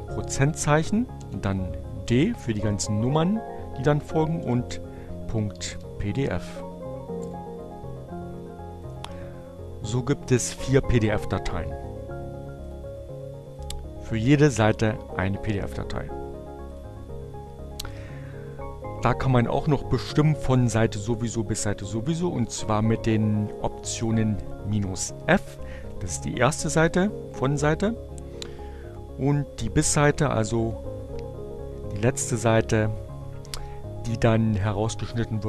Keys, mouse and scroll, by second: 1.3 Return, 8.1 click, 9.3 click, 12.2 click, 12.9 click, 13.6 click, 15.5 click.